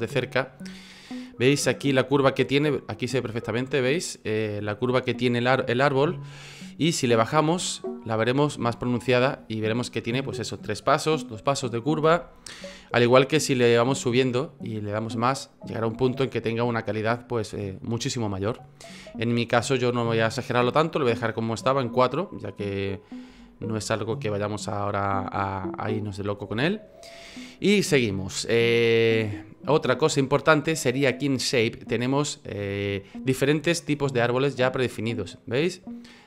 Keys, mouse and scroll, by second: 0.2 shift+middle click, 0.8 scroll up 1, 5.9 F9, 12.5 F9, 14.0 click, 14.6 click, 15.7 click, 18.9 F9, 20.4 click, 20.8 click, 22.5-23.5 scroll down 4, 23.5 shift+middle click, 23.8 middle click, 26.6 shift+middle click, 27.9 F9.